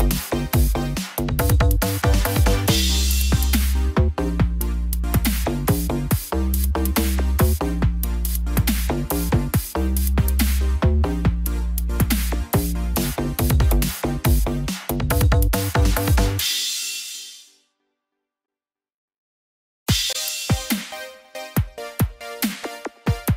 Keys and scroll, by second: 7.4 ctrl+0, 21.5 ctrl+0.